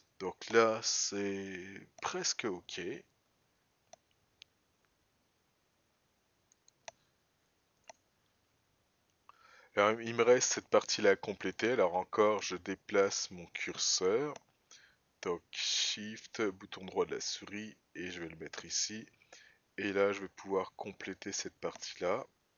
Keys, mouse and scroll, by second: 3.7 g, 12.4-14.0 right drag, 16.8 shift+right click.